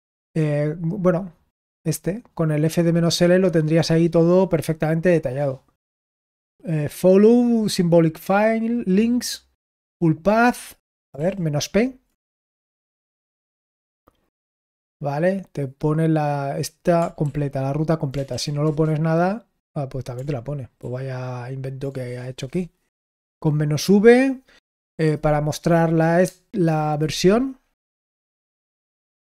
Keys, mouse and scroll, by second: 0.1 Return, 11.1 ctrl+p, 12.7 BackSpace, 12.9 p, 13.1 Return, 17.2 ctrl+p, 18.1 BackSpace, 18.2 BackSpace, 18.6 Return, 20.8 ctrl+p, 28.1 ctrl+p, 28.6 BackSpace, 28.9 shift+v, 29.1 Return.